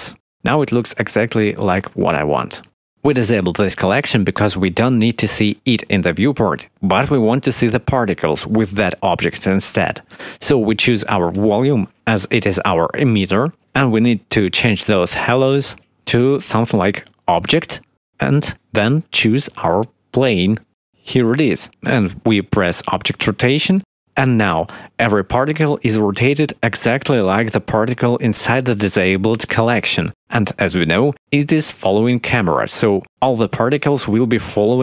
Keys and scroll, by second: 3.1 0.